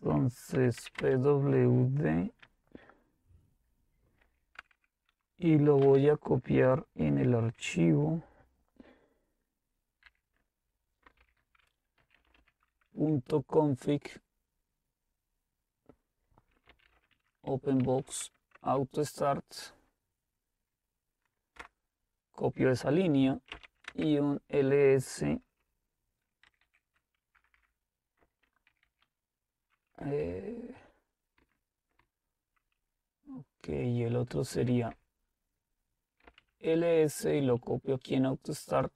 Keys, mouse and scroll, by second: 0.0-1.3 typing, 4.4-5.8 typing, 9.9-12.9 typing, 16.5-18.3 typing, 21.6 Return, 23.6-24.3 typing, 26.5 shift+Tab, 26.8-27.6 typing, 28.7 typing, 29.9-30.7 typing, 31.4 Up, 32.0 Left, 32.6 Left, 32.7-34.3 Left, 33.1-38.6 typing, 34.5 Delete.